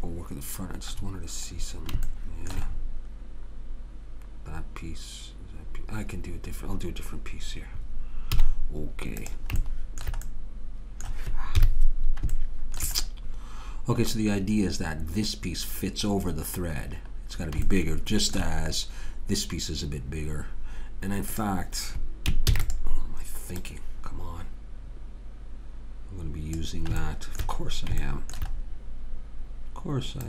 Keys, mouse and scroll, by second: 8.3 z, 10.7 middle click, 11.6 KP_3, 21.4-22.5 drag, 22.5 shift+d, 27.0 middle click.